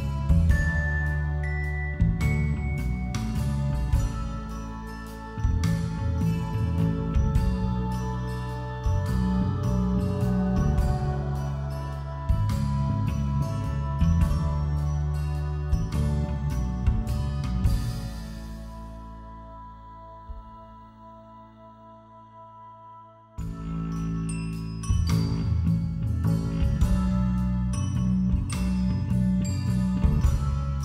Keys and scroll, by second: 7.3 b, 8.6 ctrl+=, 8.7 ctrl+-, 9.2 ], 11.5 [, 23.6 b, 26.3 [, 26.4 ], 26.6 [, 26.9 ], 28.2 b.